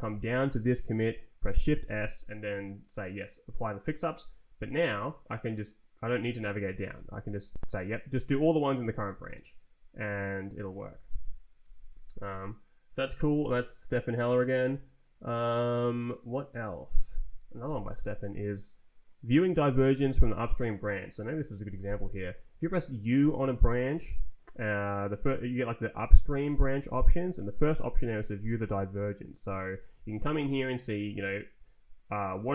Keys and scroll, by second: 1.5 shift+s, 4.1 Escape, 4.5 Up, 6.7 shift+s, 9.0 Return, 10.9 z, 11.5 Return, 17.3 ctrl+t, 18.0 Left, 21.2 u, 28.6 Return, 29.6 Down, 31.0 Up, 32.2 Down.